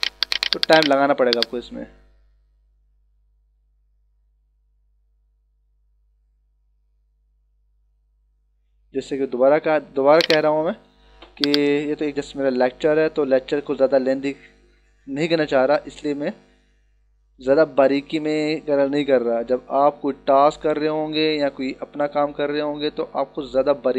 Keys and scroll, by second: 1.2 e.